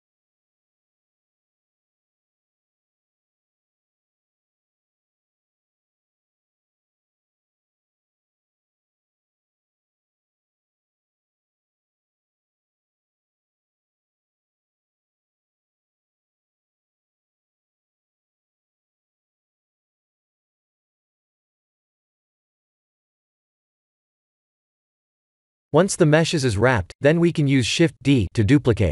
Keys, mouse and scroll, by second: 0.0 click, 0.4 click, 3.2 click, 4.1 click, 10.6 click, 12.5 shift+z, 13.1 middle click, 13.2 middle click, 14.6 click, 18.4 click, 20.9 click, 23.9 click, 27.4 middle click, 27.5 middle click, 27.8 middle click, 28.1 middle click, 28.3 middle click, 28.6 middle click, 28.7 middle click.